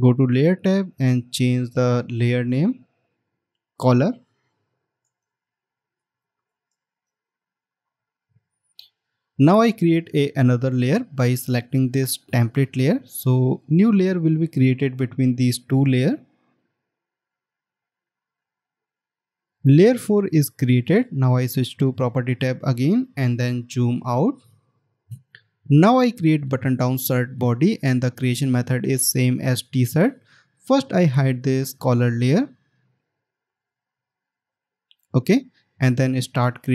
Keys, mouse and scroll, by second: 3.7 double click, 5.4-7.6 typing, 24.7 alt+scroll down 1.